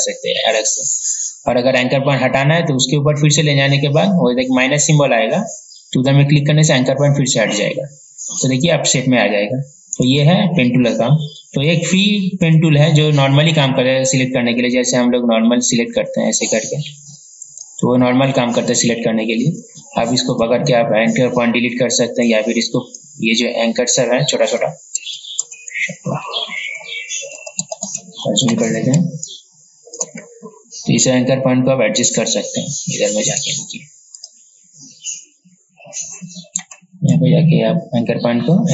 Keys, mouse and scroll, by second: 10.2-11.2 right drag, 12.7-18.2 drag, 25.2 ctrl+z, 25.6 ctrl+z, 29.2 space, 29.6 click, 33.5 right click, 34.4 click, 37.4-38.7 alt+drag.